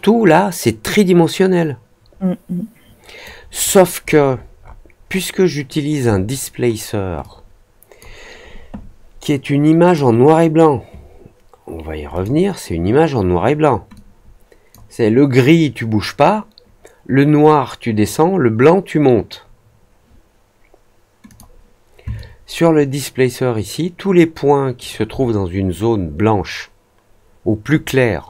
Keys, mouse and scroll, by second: 3.6 alt+middle drag, 3.9 alt+middle click, 4.0-5.2 alt+scroll up 4, 5.7 alt+scroll down 1, 7.1-7.9 drag, 9.8 click, 12.1 click, 13.9 click, 21.2 click, 22.1-24.7 alt+drag.